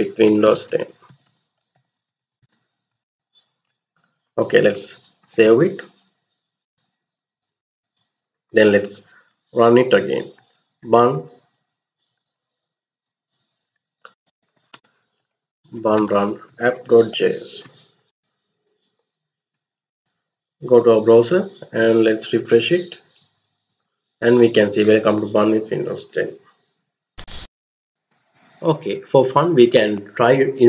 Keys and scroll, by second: 0.0-3.1 typing, 4.9 ctrl+x, 6.3 y, 7.3 Return, 9.5 Up, 10.0 Up, 11.9 Down, 12.1 Down, 13.5-18.1 typing, 19.6 alt+Tab.